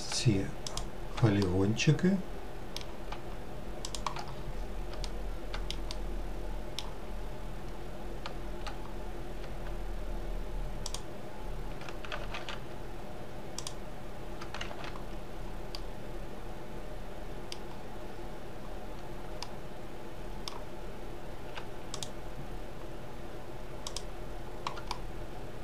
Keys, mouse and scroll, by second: 0.7 shift+click, 1.5-3.9 middle drag, 3.9 shift+click, 4.3 scroll down 2, 5.1-7.2 shift+middle drag, 7.2-7.6 scroll up 2, 8.9-9.4 scroll up 1, 10.9 shift+click, 12.2 ctrl+z, 13.6 shift+click, 14.7 ctrl+z, 15.1-15.8 scroll up 2, 15.8-17.7 middle drag, 17.7-18.1 scroll down 1, 19.4-22.0 middle drag, 22.0 shift+click, 23.9 shift+click, 24.9-25.6 middle drag.